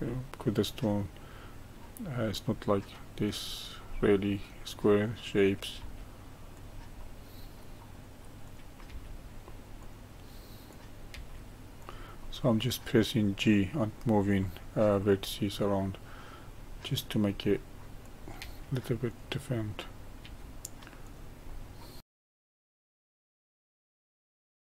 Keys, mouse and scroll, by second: 3.9-5.4 middle drag, 5.4 click, 5.8 g, 7.0-8.5 middle drag, 8.5 click, 8.9 g, 10.7 click, 11.1 g, 12.2-17.4 middle drag, 18.0 click, 18.4 g, 19.8 click, 20.2 g, 21.5-22.1 middle drag, 22.1-24.7 typing, 22.2 click, 22.2 middle click, 22.4 middle click, 22.4 scroll down 1, 22.5 middle click, 22.7 ctrl+r, 23.0 click, 23.2 middle click, 23.3 scroll down 1, 23.4 shift+middle click, 23.5 scroll up 1, 23.6 click, 23.7 middle click, 24.0 middle click, 24.1 click, 24.2 middle click, 24.3 ctrl+r, 24.6 middle click.